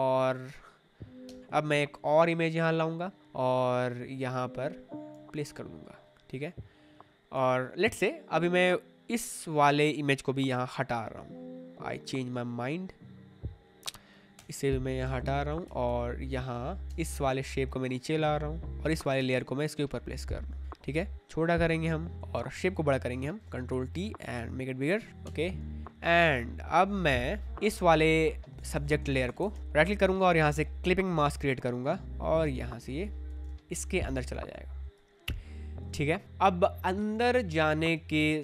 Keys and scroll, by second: 1.2 v, 6.1 Return, 10.4 m, 14.3 alt+BackSpace, 15.0 ctrl+d, 15.6 v, 16.8 space, 19.2 ctrl+z, 20.6 ctrl+t, 23.3 ctrl+t, 25.2 Return, 28.5-30.0 typing, 33.3 space.